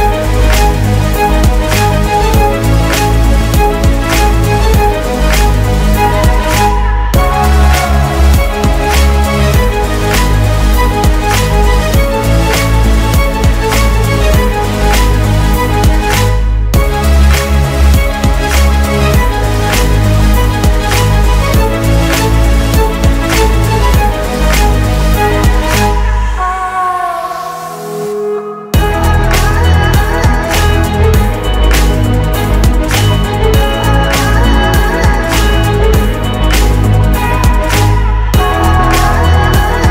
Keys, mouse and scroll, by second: 0.2 typing, 2.4-3.2 typing, 3.2 Return, 7.6 typing, 7.9 Return, 10.1 typing, 12.9 typing, 23.1 F9, 24.8 alt+click, 28.6 F9, 33.4 0, 39.4 0.